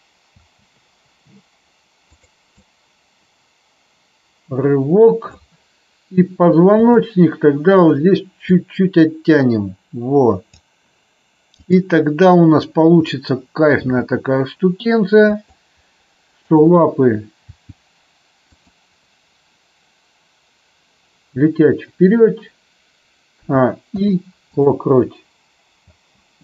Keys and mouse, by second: 0.4 space, 2.0 click, 2.4-5.3 drag, 6.8 click, 8.6-10.4 drag, 11.6-12.2 drag, 13.7 g, 15.3 click, 16.4 click, 17.4 g, 18.6 click, 23.3 a, 23.8 i, 25.8 space.